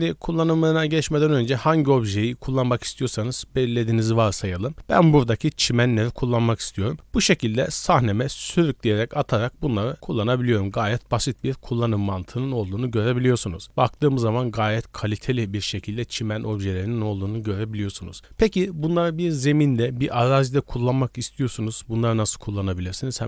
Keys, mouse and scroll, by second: 1.4 click, 6.8 click, 8.5 click, 9.7 click, 11.4 click, 12.9 KP_Decimal, 13.5 scroll down 2, 13.6 middle click, 15.3 scroll down 1, 16.4 right click, 17.1 middle drag, 17.4-17.9 scroll down 3, 18.1 shift+middle click, 18.3 scroll down 1.